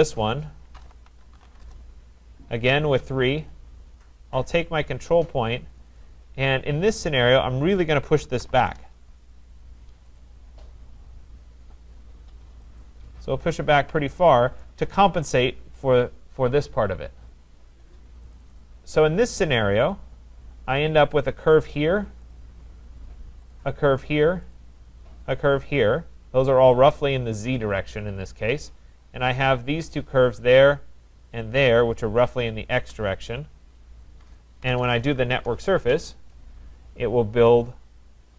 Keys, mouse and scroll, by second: 0.3 click, 0.5-2.1 typing, 3.0 Return, 4.5 click, 5.8 click, 6.0 click, 7.0-7.3 scroll, 8.0-9.0 typing, 9.4-9.7 scroll, 9.5 Return, 10.2 click, 12.8 click, 13.6 typing, 14.6 right click, 18.3 click, 18.5 click, 19.4 right click, 19.9 click, 21.2 click, 22.3 click, 23.5 shift+click, 24.6 click, 25.7 click, 26.9 click, 29.9 shift+click, 32.0 shift+click, 34.4-35.3 typing, 37.7 click, 38.1 Return, 38.2 scroll.